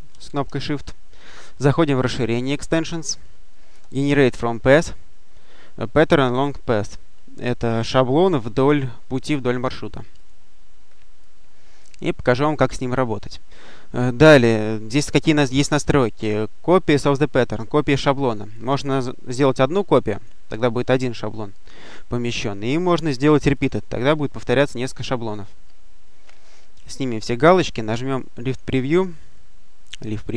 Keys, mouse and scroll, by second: 0.0 shift+click, 2.0 click, 10.0 click, 11.1-12.7 drag, 18.4 click, 20.0 click, 22.2 click, 23.4 click, 26.3 click, 28.3 click.